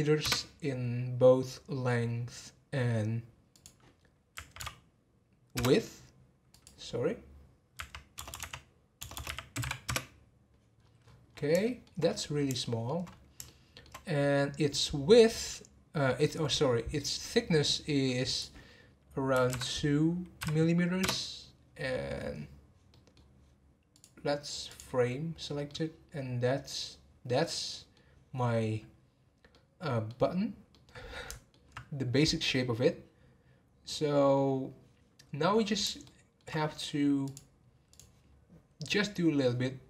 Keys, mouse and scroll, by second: 3.5-8.3 drag, 8.3 BackSpace, 9.1 BackSpace, 10.8-11.3 scroll up 11, 11.6-12.0 shift+middle drag, 12.6-13.0 shift+middle drag, 13.4-16.6 shift+middle drag, 18.3-21.5 drag, 21.9 scroll down 4, 22.9-23.9 middle drag, 23.9-25.6 drag, 25.6-33.9 middle drag, 35.4 scroll down 1, 36.0-37.2 shift+middle drag, 37.2 click.